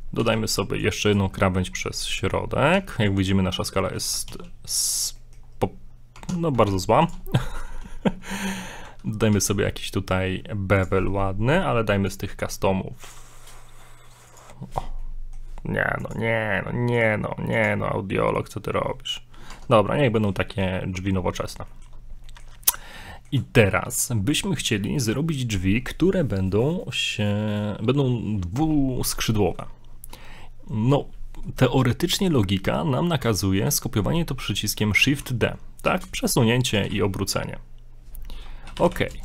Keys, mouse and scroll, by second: 0.2 ctrl+r, 1.4 middle click, 1.7 scroll up 1, 2.8 Tab, 4.3 ctrl+a, 5.2 middle click, 5.5 scroll up 1, 6.1 Tab, 7.2 ctrl+Tab, 7.5 right click, 9.3 ctrl+b, 12.1 click, 13.0 click, 15.0 middle click, 16.0 click, 16.9 click, 19.5 Tab, 19.7 scroll down 2, 20.0 middle click, 20.4 shift+middle click, 20.8 scroll up 1, 21.2 middle click, 21.7 shift+middle click, 22.3 middle click, 23.0 middle click, 24.4 middle click, 24.9 middle click, 25.0 shift+middle click, 29.1 middle click, 29.5 shift+middle click, 35.0 shift+d, 36.8 r.